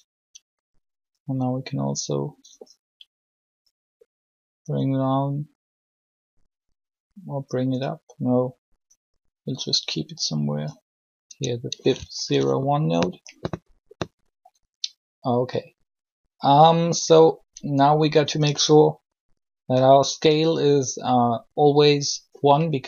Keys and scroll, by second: 11.3 Tab.